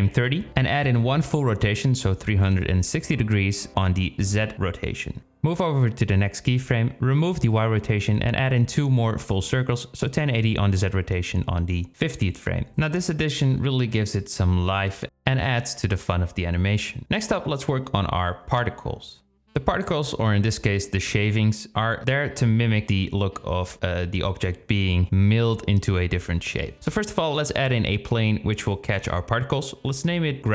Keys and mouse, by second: 0.2 click, 1.4-4.6 drag, 5.2-6.2 drag, 7.1-8.8 drag, 9.0-10.9 drag, 10.9 space, 11.3 space, 11.7 click, 12.2 space, 14.2 space, 20.7 click, 21.1-22.9 drag, 22.0 e, 23.2 click, 25.1 shift+a, 27.2 s, 29.6 ctrl+a.